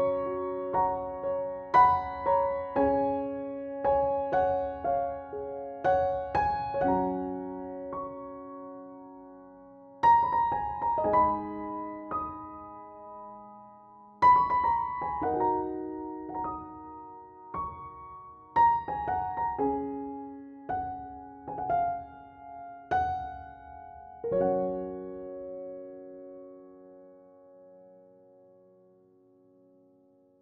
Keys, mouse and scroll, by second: 3.8 KP_1, 5.5-6.7 scroll down 1, 6.7 scroll up 1, 7.9-17.2 drag, 17.6 scroll up 1, 19.3 click, 24.6 F5, 26.3-27.4 typing, 29.1 BackSpace.